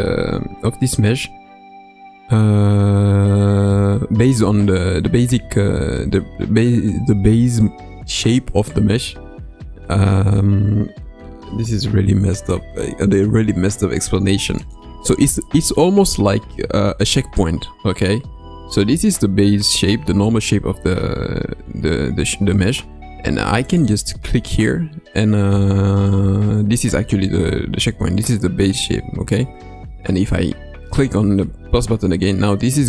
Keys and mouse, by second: 23.7-31.0 drag.